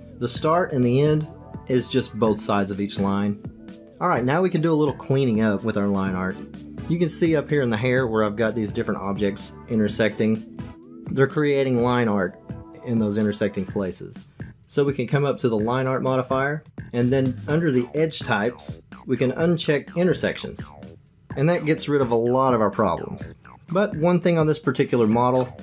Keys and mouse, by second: 9.2 click, 9.9 click, 16.0 click, 18.0 click, 20.8 click, 25.4 middle click.